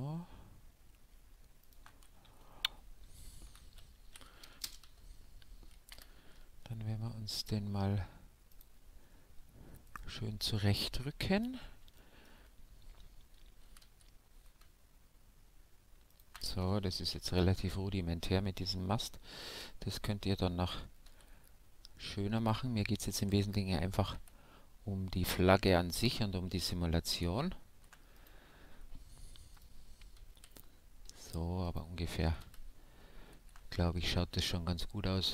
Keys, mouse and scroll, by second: 1.7-3.3 drag, 2.3 Tab, 3.5 g, 4.8 Tab, 5.9 KP_Decimal, 8.5-10.3 drag, 9.8-11.5 right drag, 10.3 middle click, 12.0-13.7 middle drag, 13.6 g, 14.0 middle click, 17.1 KP_Decimal, 18.0-19.9 middle drag, 19.4 e, 20.0-21.7 right drag, 21.0 s, 22.5-24.3 drag, 24.1 e, 27.7 ctrl+r, 30.3 s, 31.7-33.7 drag, 32.3 a, 32.4 a, 33.3 ctrl+f.